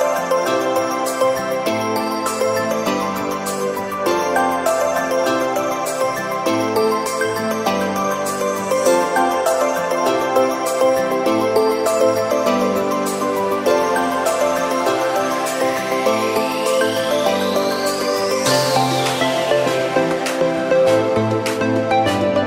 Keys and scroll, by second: 0.0 ctrl+c, 3.3 ctrl+v.